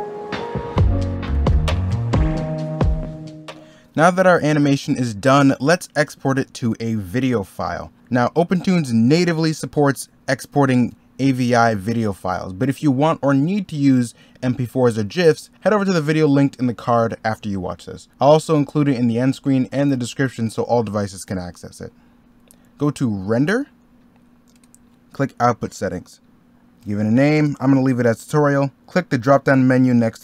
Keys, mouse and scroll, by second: 0.0 ctrl+z, 0.6 ctrl+z, 1.9 ctrl+z.